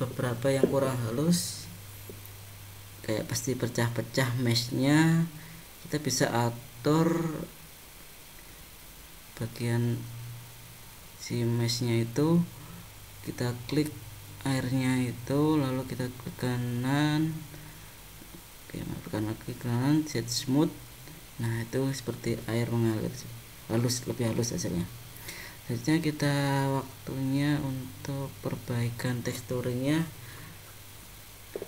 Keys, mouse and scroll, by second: 8.9 click, 11.0 middle click, 14.9 click, 18.8 right click, 25.0 click, 25.6 click, 27.5 click, 29.1 click, 31.0 click.